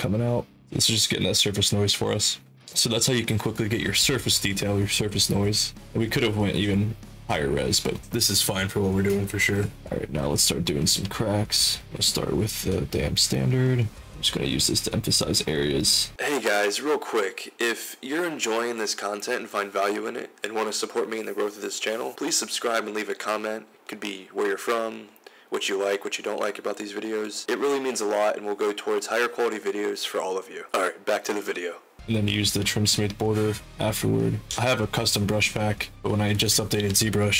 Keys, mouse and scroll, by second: 5.5 2.